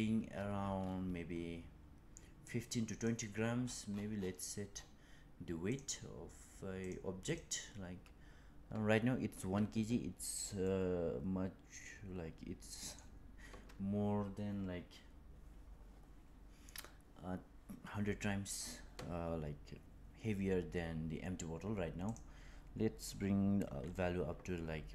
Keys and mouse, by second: 0.4 click, 2.3 click, 6.7 click, 10.5-12.9 middle drag, 21.9-24.9 drag.